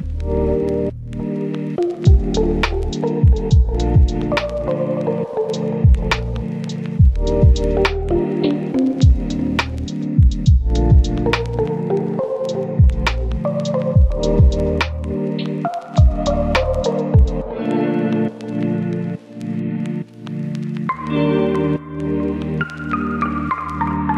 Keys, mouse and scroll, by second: 10.2 right click, 10.5-11.5 scroll up 1, 11.5 click, 15.5 right click, 16.0-18.3 drag, 18.4 right click, 18.6 click, 18.8 scroll down 1, 18.9-19.4 scroll up 1, 19.4 click, 19.6 right click, 20.1 click, 20.3 scroll down 1, 20.4-20.7 scroll up 1, 20.7 click, 21.3 scroll down 1, 21.5 scroll up 1.